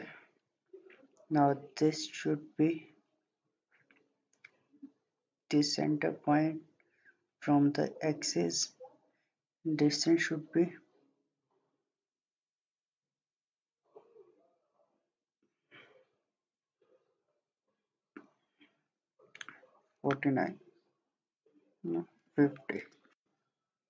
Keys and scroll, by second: 0.2 Escape, 21.8-22.8 typing.